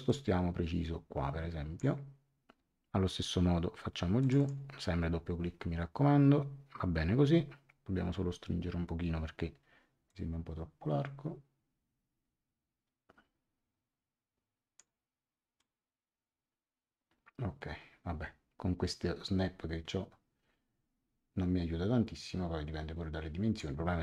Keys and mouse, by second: 0.0 click, 4.2 click, 10.0 click, 15.5 click.